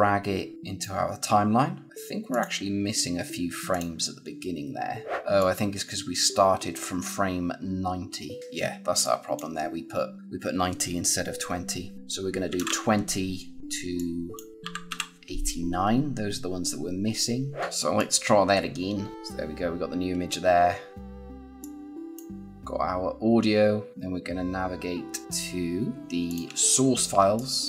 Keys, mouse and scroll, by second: 5.3 click, 8.9 click, 13.6 click, 17.8 click, 20.9 click, 24.6-26.0 scroll down 1, 26.0 ctrl+click.